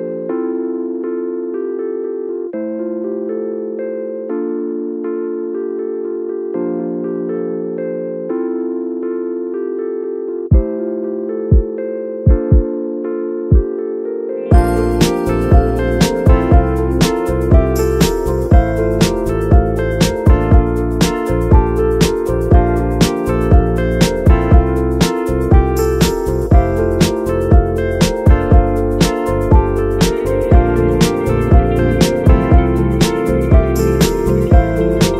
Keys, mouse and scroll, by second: 0.6-7.6 alt+right drag, 7.6 BackSpace, 15.2 Down, 19.3 ctrl+v, 21.7 click, 22.8 ctrl+v, 23.2 g, 24.7 click, 24.9 scroll down 3, 25.1 g, 27.0 g, 28.5 g, 29.5 g, 31.9-33.0 scroll up 2.